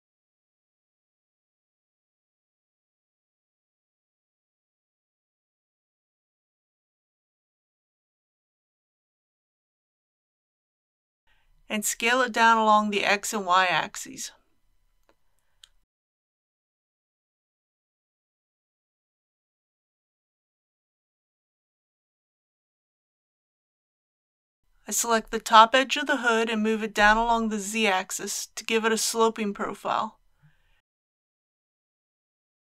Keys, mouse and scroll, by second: 1.4 shift+middle click, 3.7 e, 9.6 click, 10.2-11.5 middle drag, 11.9 s, 16.5 click, 23.6 2, 25.6 click, 26.3-28.5 middle drag, 28.5 g, 29.5 z, 32.4-32.7 drag.